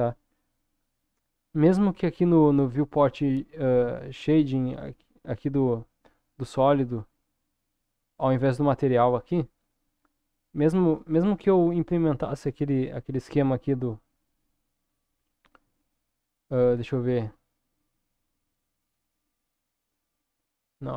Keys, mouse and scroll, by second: 5.2 click, 8.5 click, 11.0 click, 13.4 click, 14.0-16.2 drag, 16.8 Tab, 19.0 click, 20.0-20.9 drag.